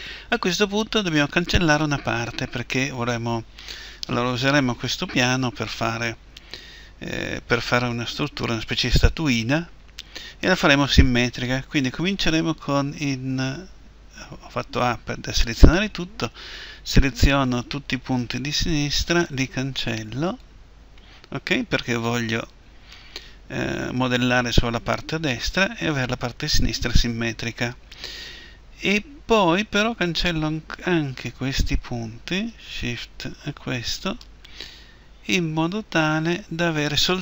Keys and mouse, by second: 13.0 a, 16.2 b, 19.4 Delete, 29.8-34.7 right drag, 34.7 Delete.